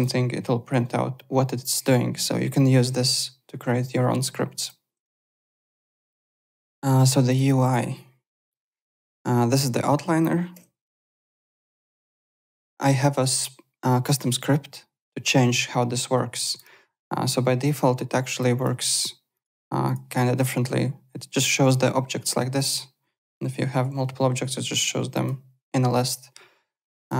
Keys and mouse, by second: 5.6-6.4 typing, 8.5 o, 11.0 click, 11.6 click, 16.4 click, 18.2 click, 19.3 click, 22.5 click, 23.3 alt+d, 23.9 w, 25.1 click, 27.0 click.